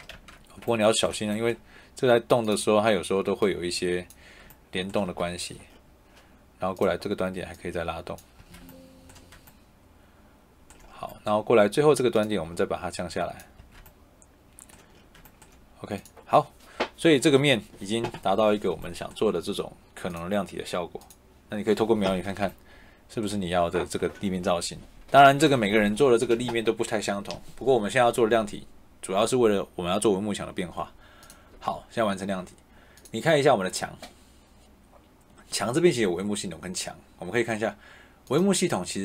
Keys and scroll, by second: 0.0 ctrl+z, 4.9 Escape, 8.3 Escape, 13.5 Escape.